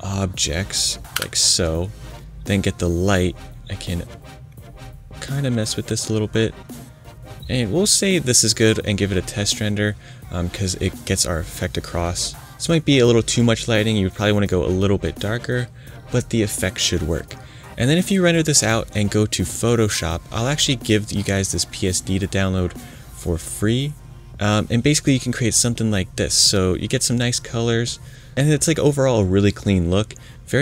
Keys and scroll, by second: 1.1 shift+BackSpace.